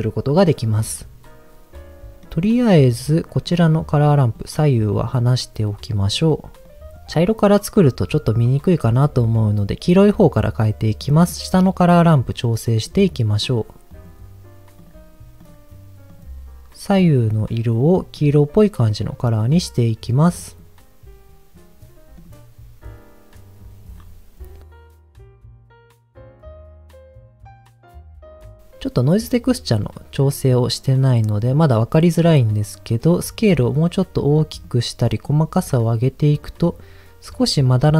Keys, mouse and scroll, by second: 2.2 middle click, 2.5 scroll up 1, 3.2 scroll up 1, 3.4 click, 4.0 click, 5.1 click, 5.9 click, 6.6 click, 11.0 click, 14.8 click, 15.4 click, 16.1 click, 22.2 click, 23.9-24.6 scroll up 1, 24.6 middle click, 26.2 click, 27.1 click, 28.0 click, 28.4 click, 29.8-31.1 middle drag, 32.0 middle click, 33.4-34.6 drag, 35.2 click, 36.4 middle click.